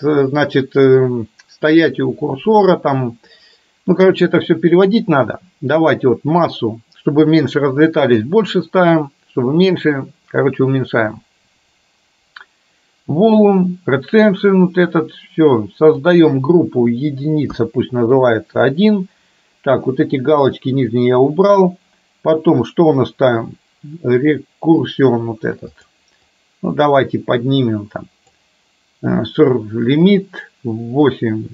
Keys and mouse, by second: 27.2-30.9 drag.